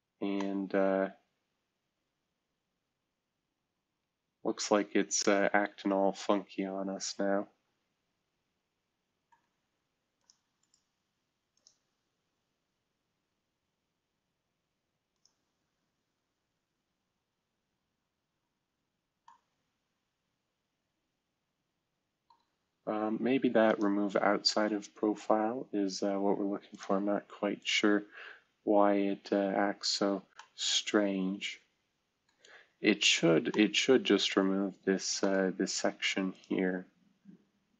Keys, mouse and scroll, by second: 0.3-1.5 middle drag, 10.1 click, 10.6-11.5 drag, 11.9-13.1 drag, 15.1 click, 18.8-19.7 scroll down 2, 26.7 click, 27.6 click, 29.8-30.6 scroll down 2, 32.6-33.9 scroll up 1.